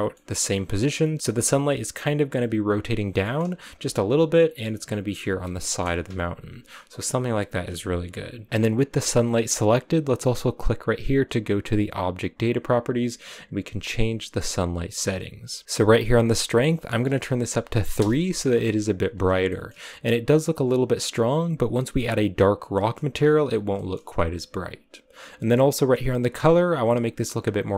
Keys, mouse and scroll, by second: 1.2 scroll up 3, 1.4 middle click, 1.7-2.3 scroll down 1, 3.2 middle click, 3.6 r, 5.9 KP_0, 8.4 r, 8.5 scroll up 2, 17.9-19.4 drag, 19.4 shift+middle click, 19.7-20.9 scroll up 7, 22.9-23.7 scroll down 8, 23.7-27.7 shift+middle drag.